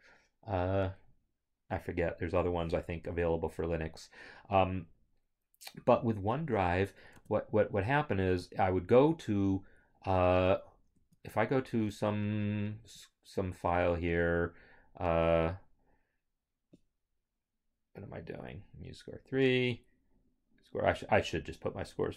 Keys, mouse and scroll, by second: 7.1 alt+Tab, 10.9 alt+shift+Tab.